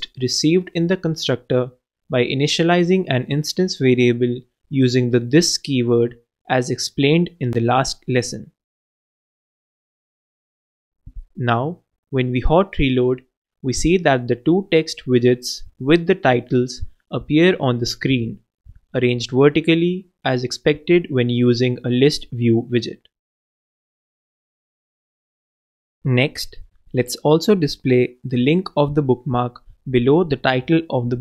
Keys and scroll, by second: 5.1 super+c, 5.5 super+Return, 5.7-6.9 typing, 7.2 super+space, 7.3 super+v, 9.9 shift+t, 20.1 super+s.